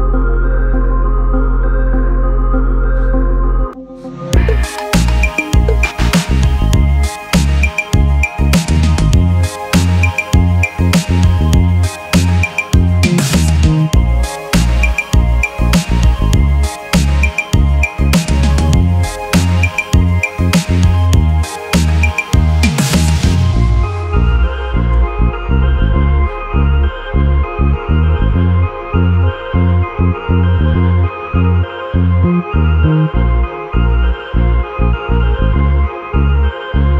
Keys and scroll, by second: 17.7 Up.